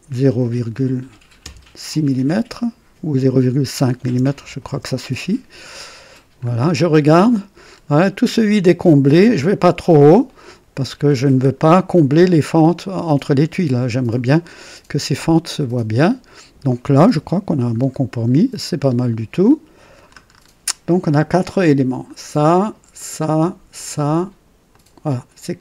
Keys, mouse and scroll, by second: 0.3 KP_Decimal, 1.3 KP_6, 4.0 BackSpace, 4.3 KP_5, 4.3 KP_5, 4.6 KP_Enter, 6.3-6.6 scroll up 1, 7.0-7.5 right drag, 7.6 scroll up 1, 7.8 typing, 11.8 scroll down 2, 12.2-13.2 drag, 14.3-15.1 scroll down 3, 14.9-16.9 drag, 17.1 KP_3, 17.7 scroll up 2, 18.1-19.0 scroll down 3, 19.3-20.2 drag, 20.2-20.6 scroll down 1, 22.0 click, 22.9 ctrl+click, 23.7 ctrl+click, 24.7 ctrl+click.